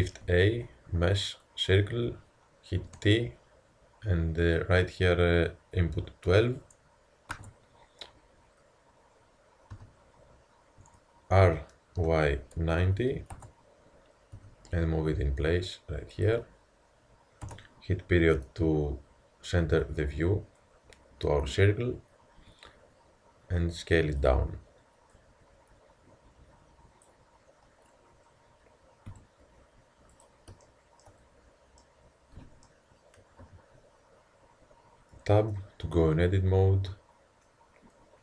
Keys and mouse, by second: 0.3 shift+a, 2.9 t, 4.4-6.4 drag, 9.7 t, 11.5 r, 14.4 g, 17.4 KP_Decimal, 22.4 s, 25.1-26.9 drag, 29.1 s, 33.4 KP_1, 35.1 Tab.